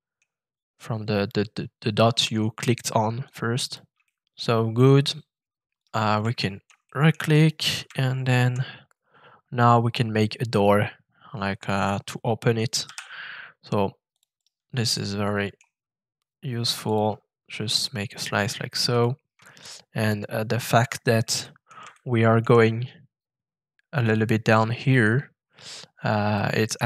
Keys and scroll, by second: 12.8 f.